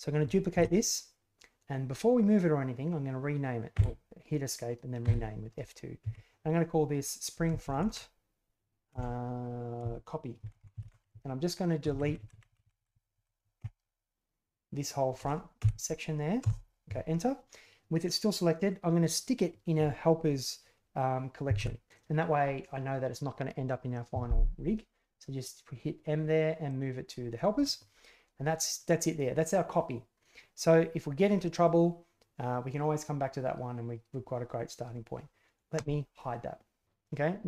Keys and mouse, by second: 0.5 shift+d, 5.0 F2, 7.6 BackSpace, 7.7 BackSpace, 12.0 Left, 12.1 Left, 12.6 Left, 21.5 m, 28.8-35.8 drag.